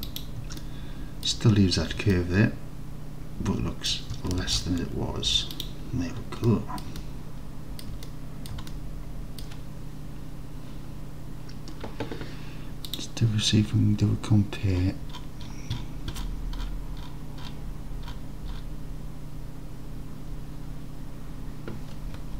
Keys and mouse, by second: 0.1 click, 0.7 alt+middle click, 2.2-3.9 alt+drag, 4.5 alt+z, 5.3 Tab, 6.5-6.9 drag, 7.1-7.9 alt+drag, 8.1-8.5 drag, 8.7 alt+click.